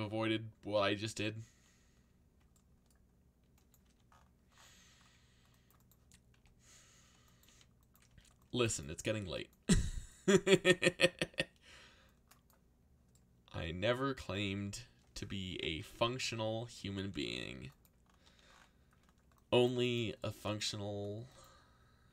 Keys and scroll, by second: 3.8 c, 6.3 y, 7.4 c, 9.6 c, 14.3 f, 15.5 ctrl+z, 16.2 y, 16.9 c, 18.2 c.